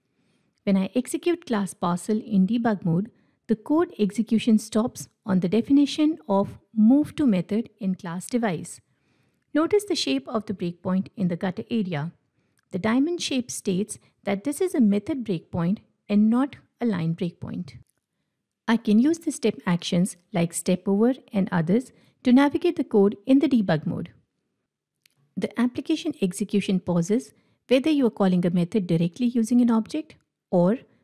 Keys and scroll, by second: 0.1 ctrl+Tab, 2.6 shift+F9, 19.1 F8, 20.6 F8, 21.9 F8, 28.9 F8.